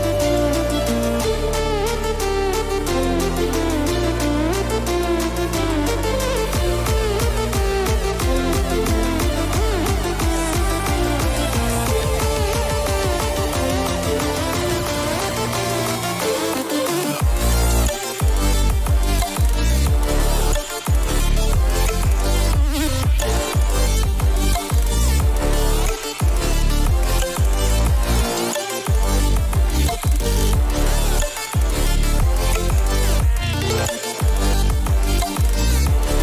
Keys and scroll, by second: 0.0-1.4 typing.